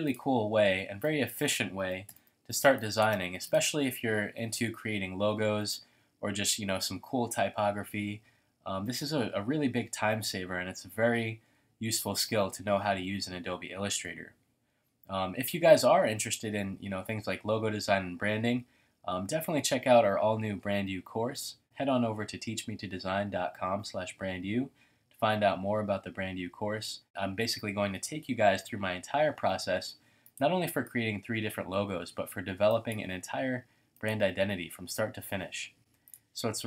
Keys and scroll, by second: 0.1 space, 0.6 space.